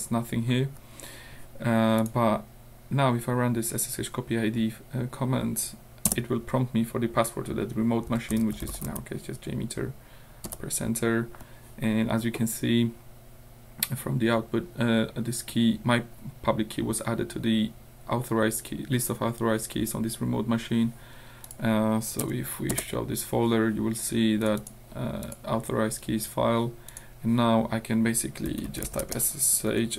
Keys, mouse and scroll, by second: 2.0 scroll up 1, 6.1 Return, 7.9-9.4 typing, 10.5 Return, 21.5 scroll up 1, 22.2 Up, 22.7 Return, 24.4-24.9 scroll up 1, 25.3 click, 26.9 click, 28.5 s, 28.9 h, 29.0 space, 29.6 Up.